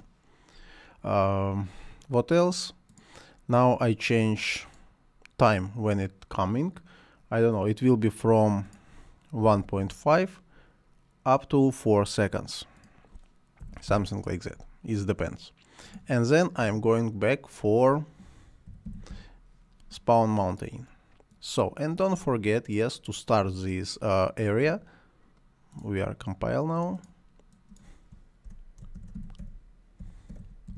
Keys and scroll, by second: 9.2-10.3 typing, 13.6 4, 13.9 Return, 16.6 Delete, 18.4-19.6 typing, 28.7-30.7 typing.